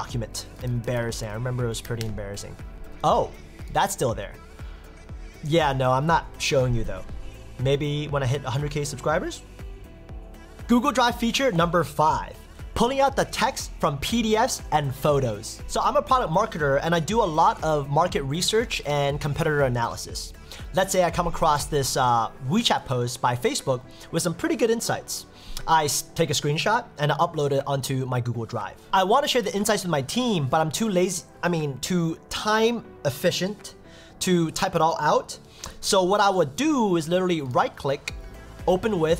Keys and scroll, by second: 2.0 Return.